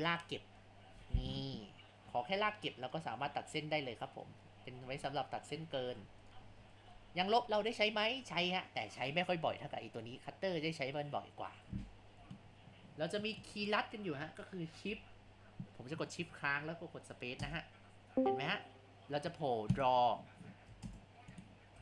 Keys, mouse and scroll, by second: 12.5 scroll.